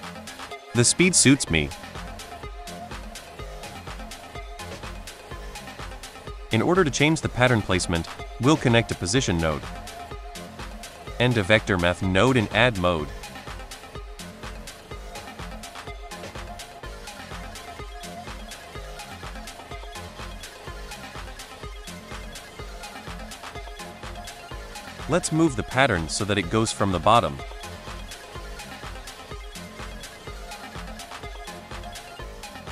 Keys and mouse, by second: 0.9-1.6 drag, 2.3-2.8 drag, 3.2-4.0 drag, 4.3 click, 5.1-5.8 drag, 5.9 click, 6.2 click, 6.2 right click, 7.6 click, 10.3 click, 10.3 right click, 10.5 shift+a, 14.0-14.5 drag, 14.9-15.6 drag, 15.9 middle click, 16.7-18.2 shift+drag, 19.3-21.8 shift+drag, 22.1-25.8 shift+drag, 26.1 space, 28.3 space, 28.9-30.3 shift+drag, 30.6-32.7 shift+drag.